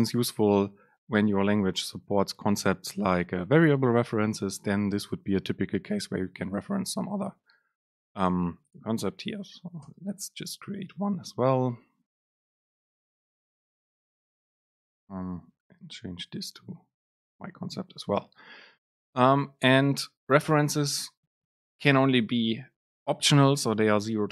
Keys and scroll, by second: 10.0 super+space, 13.8 BackSpace, 14.9 BackSpace, 14.9 super+space, 20.6 super+space.